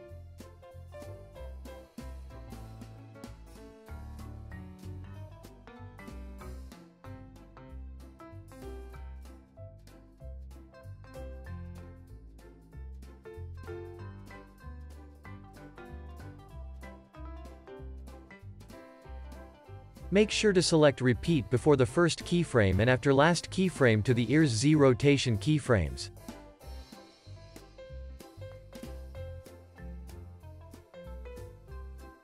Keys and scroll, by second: 7.3 super+s, 7.7 z, 8.7 x, 9.5 z, 11.2 super+c, 13.0 super+v, 14.9 c, 15.6 super+v, 17.0 super+s.